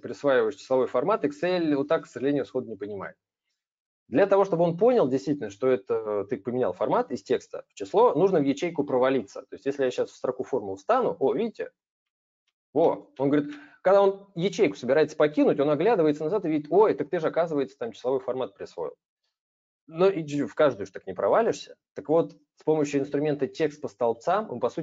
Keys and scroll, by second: 22.2 ctrl+z.